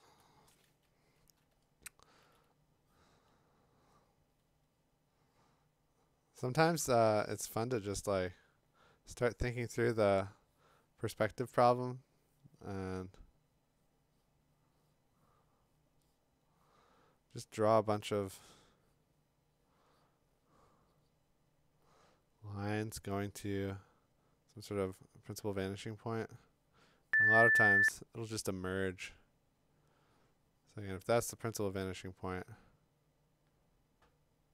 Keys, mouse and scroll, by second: 0.1 click, 0.1 click, 0.2 click, 1.5-2.2 [.